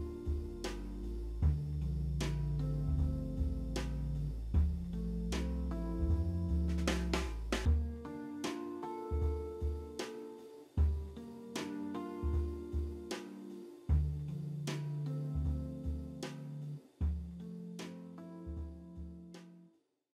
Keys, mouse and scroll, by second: 0.4 alt+middle click, 0.6 middle click, 0.8 F4, 0.9 F4, 4.5 middle click, 8.4 Delete, 9.6 middle click, 14.8 middle click.